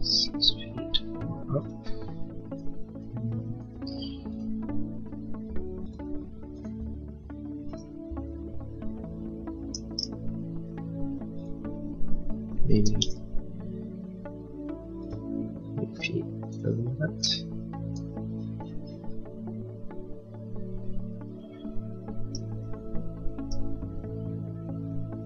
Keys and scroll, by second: 3.6 Escape, 12.8 ', 13.0 Return, 17.0 space, 17.2 Escape.